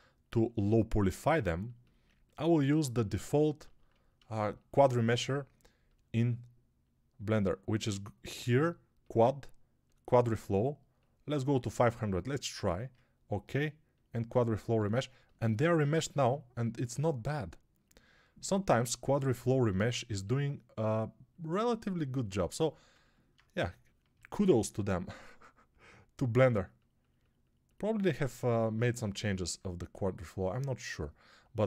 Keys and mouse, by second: 15.0-19.6 alt+middle drag, 19.6-31.6 shift+drag.